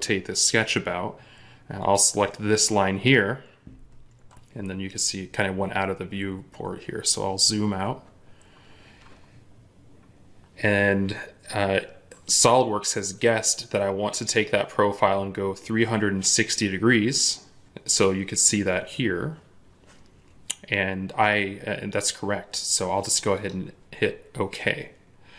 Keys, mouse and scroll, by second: 6.1 scroll up 1, 25.2-25.3 scroll up 1.